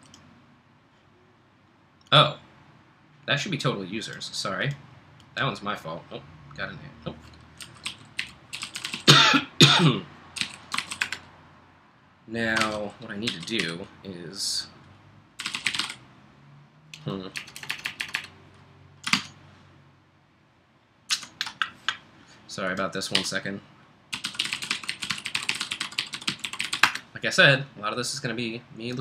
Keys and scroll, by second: 7.4-9.4 typing, 10.5-11.3 typing, 12.6 ctrl+l, 13.3-14.1 typing, 15.2-16.3 typing, 17.4-18.2 typing, 19.1 super+Tab, 21.1 super+Tab, 23.2-27.3 typing.